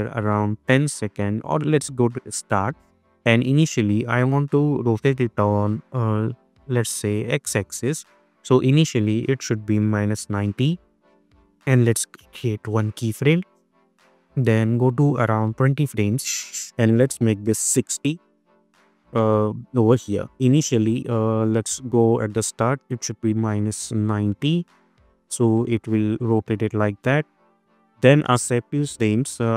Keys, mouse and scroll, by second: 0.9-2.2 drag, 5.4 ctrl+z, 5.7-6.6 click, 6.6 ctrl+z, 7.0 click, 7.1-8.0 click, 8.2 ctrl+z, 9.0 click, 10.4 Return, 13.0 click, 15.4 click, 17.7 Return, 20.5-21.1 drag, 22.9 space, 24.9-29.3 drag.